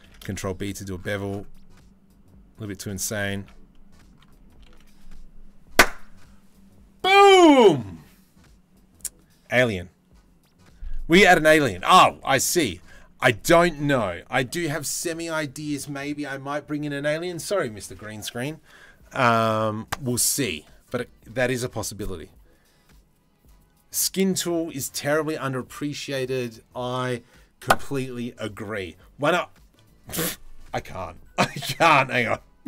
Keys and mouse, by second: 3.1 Tab, 3.3-3.7 drag, 5.1 ctrl+s, 12.0 click.